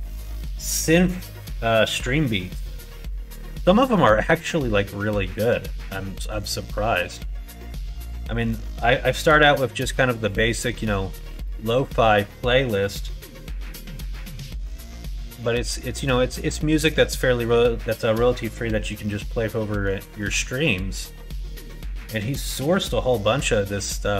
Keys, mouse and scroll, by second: 5.3 middle click, 5.5 right click, 6.2 middle click, 6.5 right click, 7.0 middle click, 7.3 right click, 7.5 middle click, 8.2 middle click, 9.3 shift+middle click, 9.8 middle click, 10.9 shift+middle click, 11.3 scroll up 1, 11.4 middle click, 12.7 middle click, 14.0 middle click, 14.6 shift+scroll up 1, 14.7 shift+click, 14.8 shift+scroll down 1, 15.1 scroll up 1, 15.1 click, 15.3-18.6 scroll down 1, 18.6 click, 19.4 scroll up 1, 19.5 click, 19.6 scroll down 1, 19.9 shift+middle click, 20.3 middle click, 21.1 middle click, 23.4-24.1 middle drag.